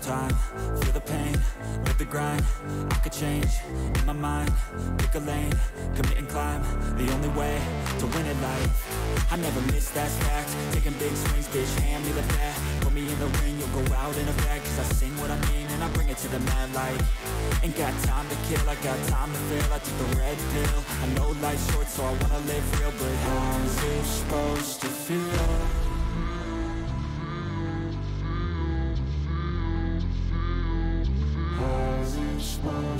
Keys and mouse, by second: 1.0 ctrl+click, 1.6 click, 1.7 click, 3.0-4.1 drag, 5.2 click, 5.9 click, 6.0 click, 6.9 click, 8.5 click, 9.3 click, 10.2-11.5 drag, 12.3 click, 13.3 click, 13.9 click, 14.5-15.6 drag, 16.5 click, 18.4 click, 18.9-20.0 drag, 20.7 click, 21.2 ctrl+click, 21.6 click, 21.7 click, 22.5-23.5 drag, 24.2 click, 25.5 click, 26.6 click, 27.4-28.5 drag, 29.9 click, 30.7-32.1 drag.